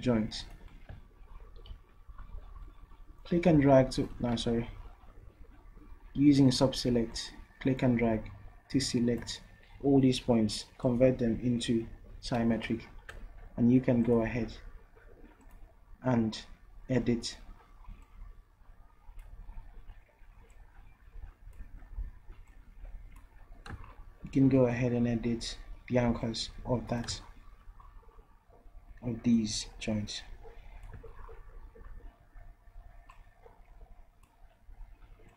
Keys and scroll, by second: 4.4 ctrl+z.